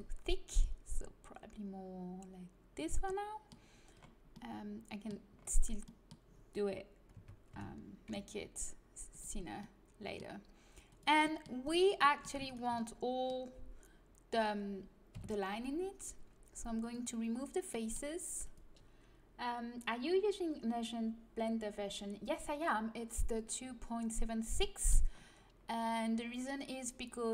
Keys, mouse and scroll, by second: 7.1 Tab, 7.5 s, 10.9-12.7 drag, 11.6-15.1 middle drag, 11.6-12.7 right drag, 15.1 Delete, 18.4-20.2 drag.